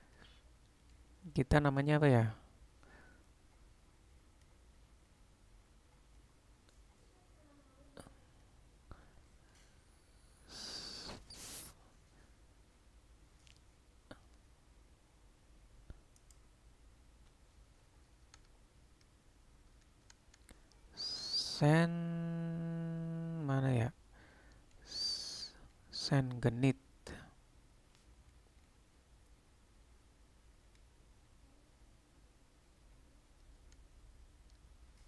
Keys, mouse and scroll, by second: 18.6 BackSpace, 18.9 BackSpace, 21.5 BackSpace.